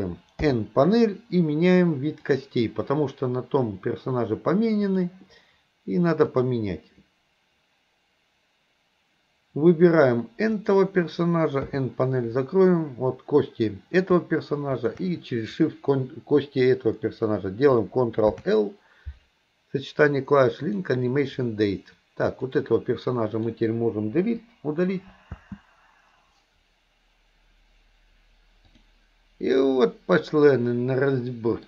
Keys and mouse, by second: 0.4 n, 2.4 click, 5.1-8.4 drag, 10.6 click, 11.7 n, 14.8 shift+click, 18.3 ctrl+l, 22.7-23.6 drag, 24.3 Delete, 25.4 space, 28.8 click, 29.6-31.6 middle drag.